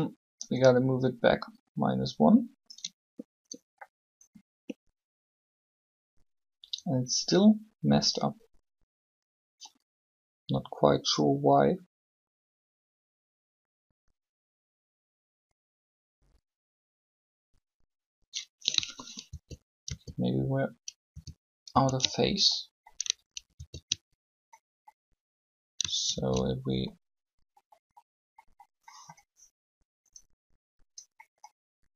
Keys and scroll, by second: 19.3 ctrl+z, 20.3 ctrl+z, 21.7 ctrl+z, 26.1 ctrl+z.